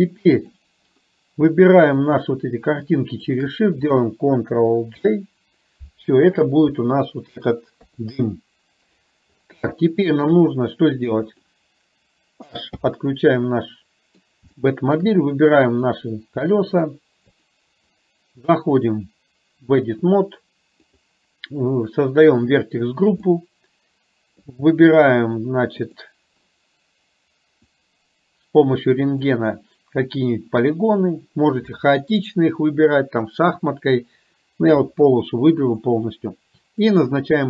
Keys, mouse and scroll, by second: 3.2 shift+click, 5.0 ctrl+j, 7.9 KP_3, 9.9-10.4 shift+middle drag, 11.5 click, 12.7 h, 13.5-14.2 middle drag, 14.6-15.0 shift+middle drag, 16.6 middle drag, 17.2 click, 18.9-20.0 drag, 22.5 click, 23.2-24.5 middle drag, 27.7 click, 37.0 click.